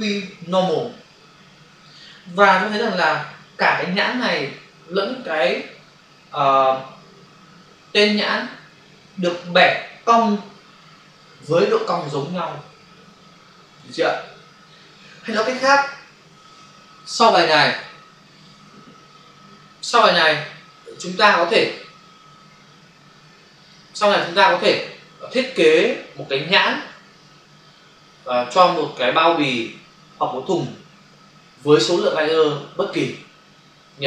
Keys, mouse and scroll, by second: 20.3 click, 20.8 click, 21.0 double click, 23.6 click, 23.7 click.